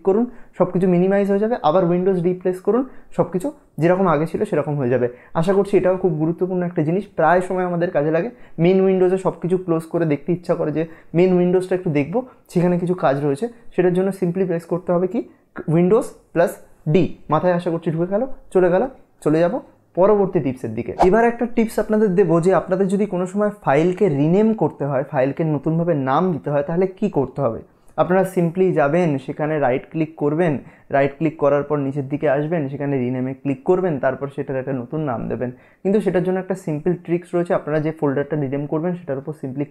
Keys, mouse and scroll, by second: 28.2 Num_Lock, 28.2-29.2 scroll down 2, 29.2 right click, 31.3 click.